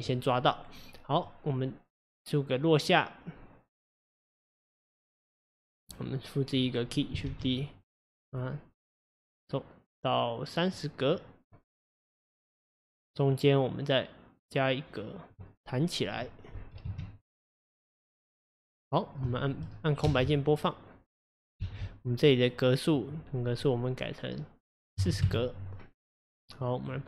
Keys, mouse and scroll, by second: 1.3-4.2 drag, 6.0-7.3 drag, 7.3 shift+d, 9.0-16.6 drag, 16.6 g, 18.7-19.3 scroll down 2, 19.3-20.0 shift+middle drag, 20.0 space, 21.6 space, 26.6 click.